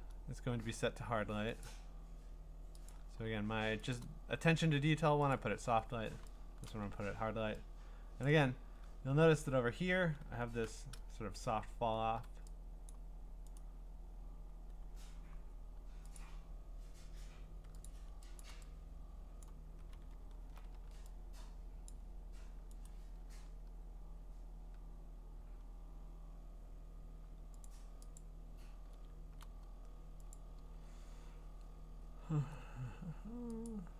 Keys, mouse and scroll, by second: 1.6 click, 2.9 click, 3.2 middle click, 3.3 middle click, 3.9 click, 5.3 click, 6.6 click, 8.3 click, 10.9-12.1 scroll, 12.9 click, 13.6 right click, 14.3-15.6 scroll, 16.2 click, 17.9 click, 18.4 click, 19.4 click, 20.0-20.5 scroll, 20.7 ctrl+z, 21.9 click, 22.9 right click, 23.8-24.6 scroll, 24.6 scroll down 7, 24.7-25.5 scroll down 2, 25.5-26.5 scroll down 15, 27.7 click, 28.2 click, 28.2-28.7 scroll, 30.4 click, 33.7 click.